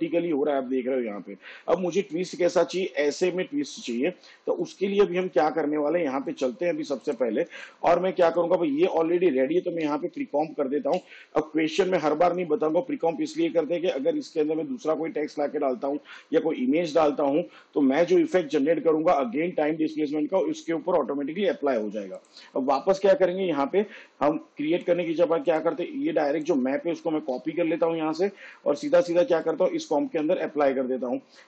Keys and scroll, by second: 10.9 ctrl+shift+c, 27.3 ctrl+c, 30.2 ctrl+v.